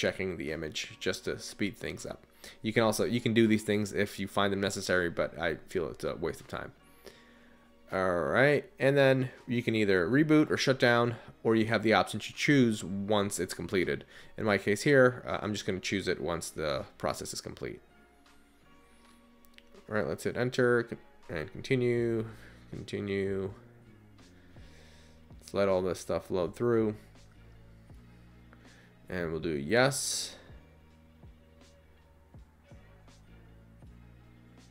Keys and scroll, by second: 2.6 Return, 7.6 Return, 16.6 Up, 17.4 Return, 20.4 Return, 32.7 y, 33.4 Return.